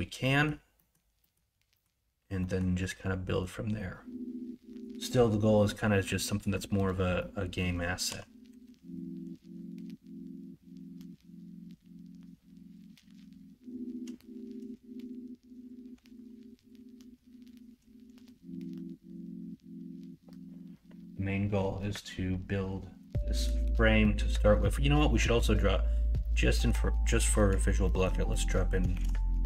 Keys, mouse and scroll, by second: 6.0 middle click, 7.2 middle click, 8.0 KP_1, 8.4 KP_3, 15.8 2, 25.3 middle click, 26.2 middle click, 27.1 middle click, 27.8 middle click, 28.2 middle click, 28.9 shift+a.